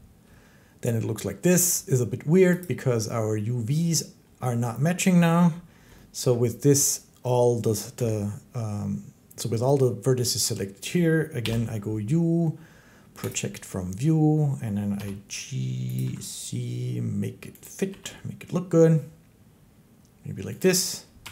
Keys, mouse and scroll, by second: 0.0 click, 2.4 click, 6.1 shift+middle click, 7.8 a, 11.2 u, 13.1 click, 14.8 g, 15.8 click, 15.9 s, 17.5 click, 17.7 g, 20.4 click, 21.1 Tab.